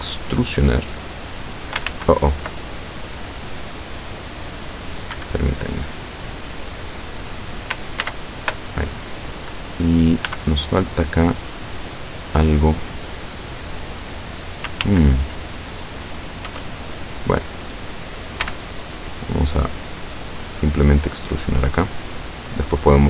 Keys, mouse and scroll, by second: 2.0 ctrl+z, 5.2 Escape, 8.1 ctrl+z, 10.3 b, 10.5-11.5 drag, 12.6-14.7 drag, 14.9 ctrl+z, 16.5 e, 18.5 z, 22.5 click.